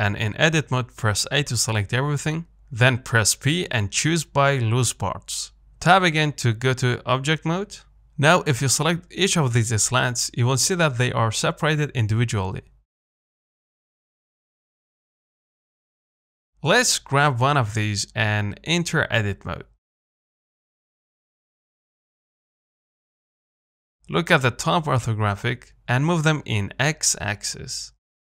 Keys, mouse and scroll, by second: 0.1 Tab, 0.6 a, 6.9 Tab, 7.7 click, 8.6 click, 9.0 scroll up 3, 9.3-10.6 shift+middle drag, 10.6-11.0 scroll up 3, 11.0-12.4 shift+middle drag, 12.4-13.3 scroll down 2, 13.3 scroll down 1, 15.5-16.2 scroll down 3, 16.2 click, 16.4-16.7 scroll up 2, 16.7 shift+middle click, 17.1 scroll up 1, 17.3 shift+middle click, 18.0 click, 18.3 Tab, 18.5-22.3 middle drag, 22.3 z, 22.8 click, 25.0 KP_7, 26.3 g.